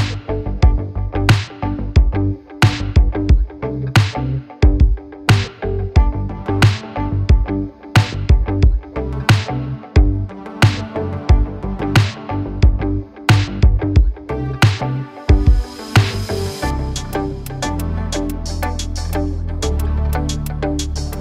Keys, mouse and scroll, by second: 0.6-2.1 right drag, 4.6 right click.